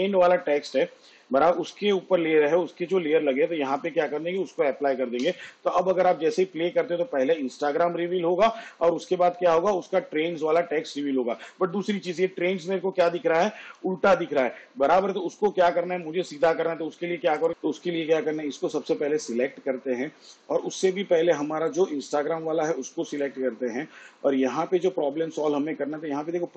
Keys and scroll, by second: 5.3 space, 11.5 space, 13.8 v.